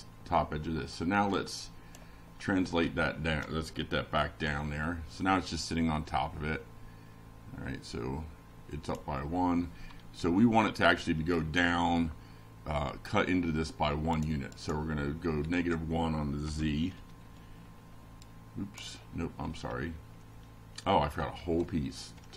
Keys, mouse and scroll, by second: 0.8 click, 3.7 BackSpace, 5.5 Right, 5.6 1, 6.1 Down, 7.0 F6, 7.6 F5, 8.5 click, 15.2 click, 16.5 click, 18.2 click, 19.2 Left, 19.6 Down, 20.3 Return, 20.9 Down, 21.8 Return, 22.2 Up.